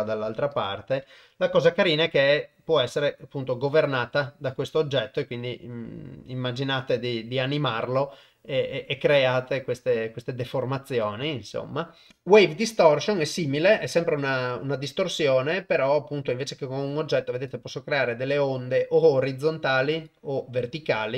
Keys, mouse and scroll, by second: 0.6 click, 12.1-13.3 drag, 17.4 click, 19.9 click.